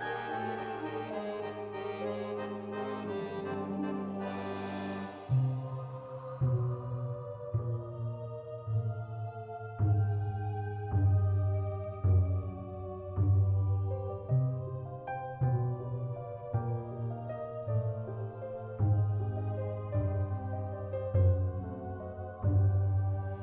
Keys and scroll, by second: 14.8 space, 21.3 u, 22.5 z.